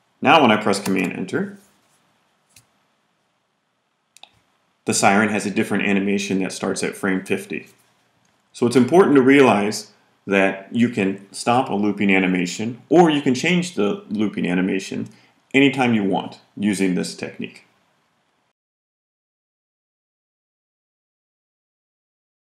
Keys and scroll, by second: 0.8 super+Return.